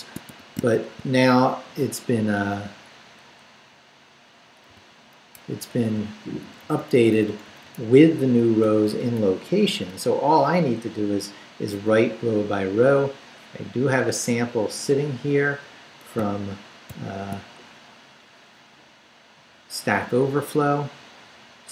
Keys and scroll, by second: 0.0-0.7 typing, 3.2 Left, 4.7 d, 5.3 BackSpace, 5.7 Left, 5.9 d, 6.2 Right, 8.4 shift+Right, 8.6 shift+', 9.2 shift+BackSpace, 9.7 shift+;, 16.9 shift+super+b.